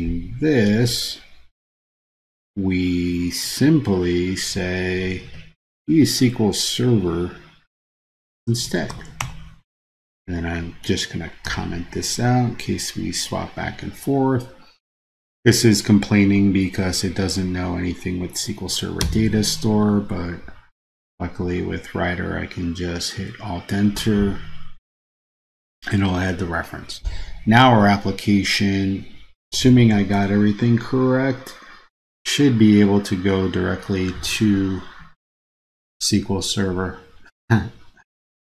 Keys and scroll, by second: 3.6 super+c, 5.4 super+v, 19.2 alt+Return.